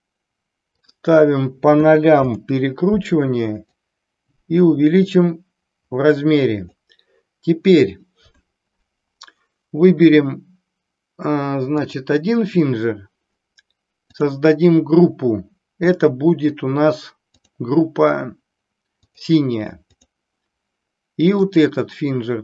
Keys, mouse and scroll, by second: 0.7-2.7 drag, 3.6-6.6 drag, 11.9 click, 14.1 click, 17.4-19.2 drag, 19.9 click, 21.4-22.1 drag.